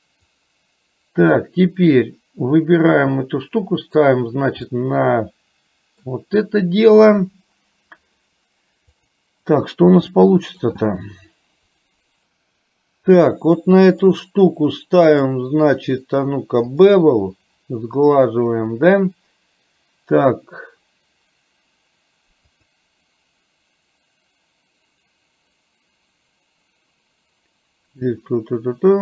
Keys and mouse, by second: 0.4-1.5 drag, 2.8-4.3 drag, 4.8-6.2 middle drag, 10.3 middle click, 14.1 click, 15.2-17.1 drag, 22.6-29.0 drag.